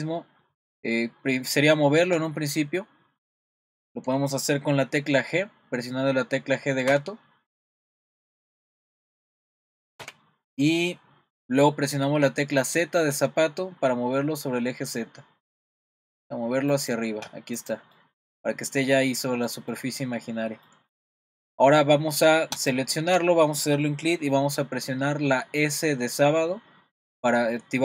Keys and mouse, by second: 7.8 click, 8.9 click, 10.0 g, 17.6 click, 17.9-19.5 middle drag, 19.7 middle click, 20.7 middle click, 22.7 click.